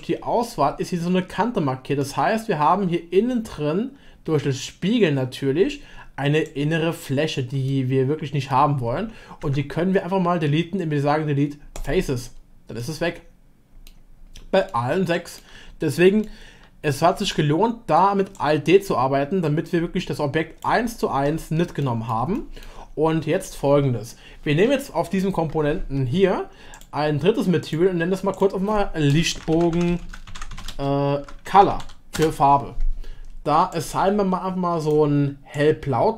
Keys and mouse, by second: 2.0-5.4 middle drag, 6.5-7.1 drag, 7.7 middle click, 9.4 x, 12.8-13.2 middle drag, 13.2 click, 14.7-15.4 shift+middle drag, 16.2-17.3 shift+middle drag, 21.8 middle click, 22.3 shift+middle click, 26.7-27.8 middle drag, 27.8-32.8 drag, 33.7-34.9 drag.